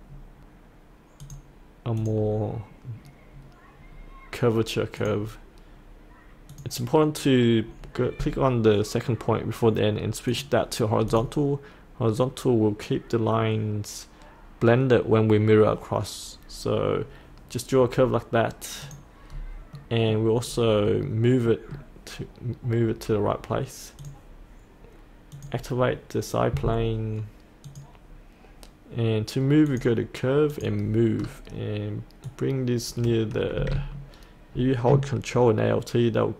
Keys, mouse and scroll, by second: 3.5-3.9 scroll down 1, 3.9-5.0 scroll up 1, 5.0 click, 19.3-19.7 scroll up 1, 19.7 middle click, 20.4-21.4 scroll down 1, 21.4 middle click, 24.0 click, 31.1-32.2 scroll down 1, 32.2-36.3 drag.